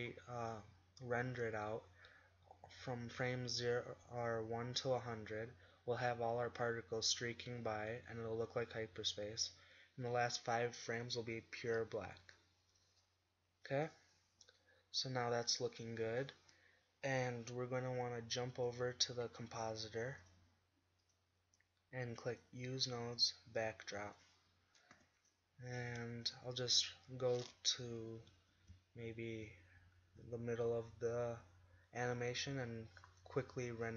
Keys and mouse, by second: 13.4-14.2 middle drag, 18.5-20.2 drag, 27.2 g, 27.9 Left, 28.3 Right, 29.1 ctrl+Right, 30.2 click.